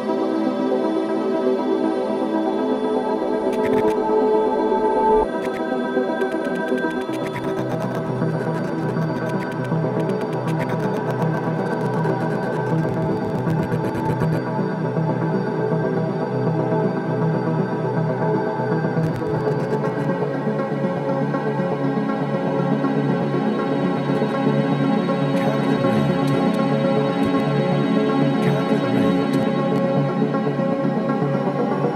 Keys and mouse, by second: 5.4-14.3 drag, 15.8 click, 16.9 typing, 18.2-19.0 drag, 19.2-20.6 drag, 21.0-21.9 typing, 23.2-25.0 drag, 24.6 typing, 26.4 typing, 27.2 click, 27.7 typing, 29.3-30.2 typing, 29.7-30.2 drag, 30.5 ctrl+alt+click, 30.9 alt+shift+click, 31.8 click.